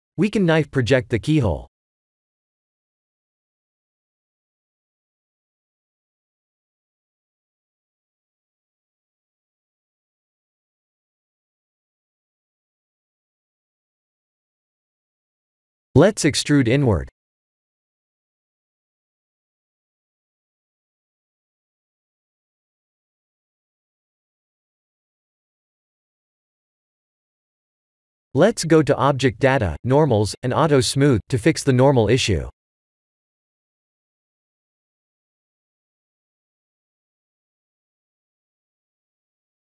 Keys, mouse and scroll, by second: 0.5 right click, 1.7 shift+click, 2.4 Tab, 3.8 click, 5.7 Tab, 6.2-6.7 scroll up 8, 6.9 middle click, 7.8-8.7 scroll down 11, 8.5 middle click, 10.2-10.6 scroll up 4, 11.2-11.5 scroll up 2, 12.4 ctrl+z, 17.1 click, 18.1 click, 19.1 ctrl+z, 20.2 e, 22.9 middle click, 23.8-24.1 scroll down 3, 24.1 Tab, 24.6 shift+z, 25.1 scroll down 2, 25.6 middle click, 25.7-26.3 scroll up 7, 26.6 click, 27.7 click, 29.2 click, 29.9 click, 30.2-31.1 scroll down 7, 30.6 Tab, 31.4 click, 31.8 middle click, 33.1 Tab, 33.4 middle click, 35.4 click, 36.1-36.5 scroll down 2, 36.6 middle click.